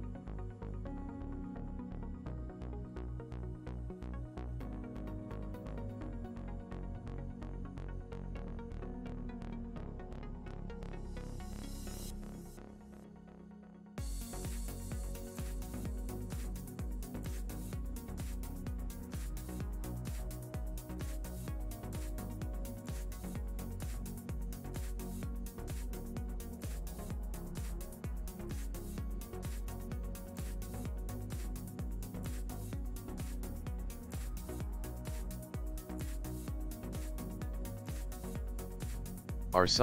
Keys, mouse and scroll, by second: 1.8 click, 2.9 shift+middle click, 4.9 click, 8.2 shift+middle click, 10.0 click, 10.7 click, 10.8 click, 16.6 middle click, 18.5 click, 22.2 ctrl+middle click, 24.2 click, 27.5 ctrl+middle click, 28.2 shift+middle click, 29.4 ctrl+middle click, 30.8 ctrl+middle click, 31.7 ctrl+middle click, 31.9 middle click, 32.4 ctrl+middle click, 35.8 click, 37.2 middle click, 37.9 ctrl+middle click, 38.4 middle click.